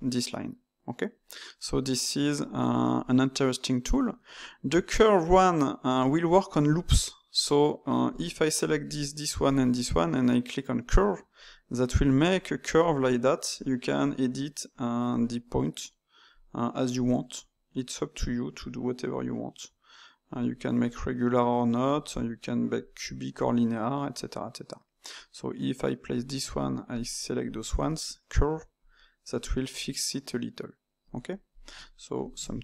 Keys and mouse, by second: 2.4 ctrl+z, 4.3 middle click, 5.2 click, 8.1 click, 8.8 shift+click, 9.4 shift+click, 10.7-20.3 drag, 20.8 click, 21.9-24.8 drag, 26.4 click, 26.8 shift+click, 27.3 shift+click, 28.7-31.6 drag, 32.1 ctrl+shift+click.